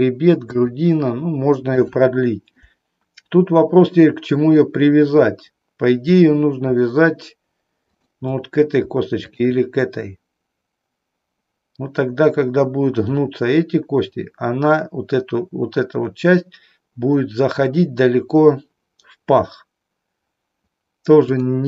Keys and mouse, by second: 1.8 click, 7.8 shift+click.